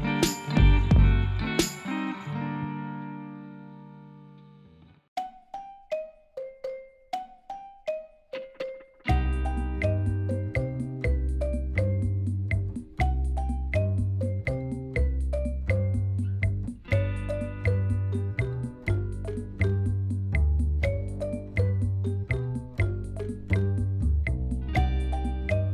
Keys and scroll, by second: 0.3 shift+z, 3.0 ctrl+z, 16.5 shift+z, 19.5 Tab, 23.9 shift+z, 25.5 shift+z.